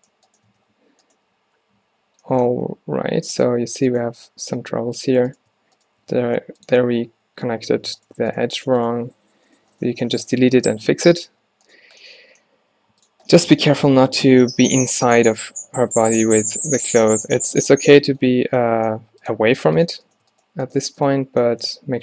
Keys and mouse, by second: 0.6 f, 0.8 z, 1.3 z, 1.8 z, 2.7 ctrl+t, 3.1 ctrl+t, 4.5 x, 6.2 x, 7.5 z, 11.4 f, 12.6 g, 13.1 drag, 13.8 e, 16.9-17.6 drag, 17.6 e, 18.7 drag, 19.1 g, 19.5 r.